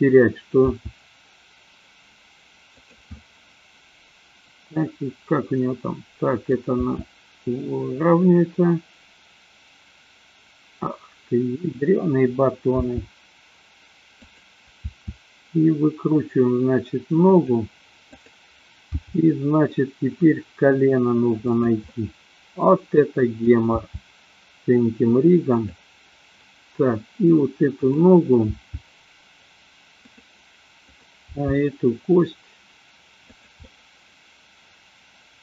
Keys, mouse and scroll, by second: 0.7 r, 3.2-6.6 middle drag, 6.8 r, 12.8 g, 14.8 r, 17.4 click, 18.9 g, 21.8-23.6 middle drag, 23.7 g, 25.7 click, 27.7 click, 28.6 g, 30.2 drag, 30.8 click, 31.8 g, 33.6-35.4 middle drag.